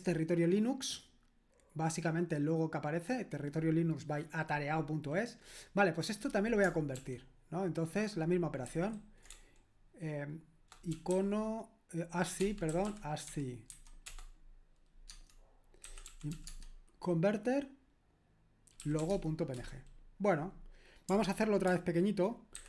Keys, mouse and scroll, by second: 7.0 ctrl+p, 8.7 ctrl+q, 9.3-16.8 typing, 18.6-19.5 typing, 19.5 Return, 22.5 ctrl+alt+-.